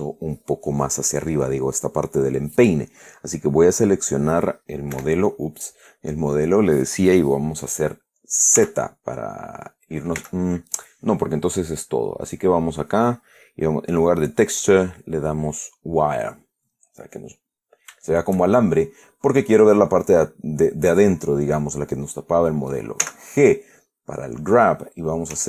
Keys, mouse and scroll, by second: 3.6 right click, 5.3 Escape, 8.9 z, 10.5 z, 12.6 click, 14.6 click, 15.9 click, 17.0-18.2 middle drag, 18.4-19.5 shift+middle drag, 20.4 right click, 23.3 g, 24.1 click.